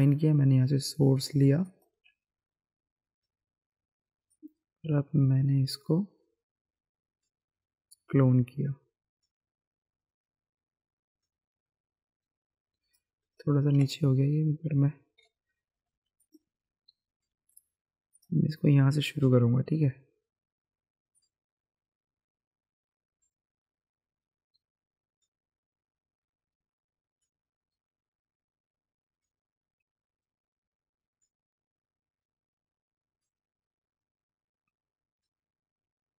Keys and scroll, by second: 13.7 ctrl+z, 15.2 [.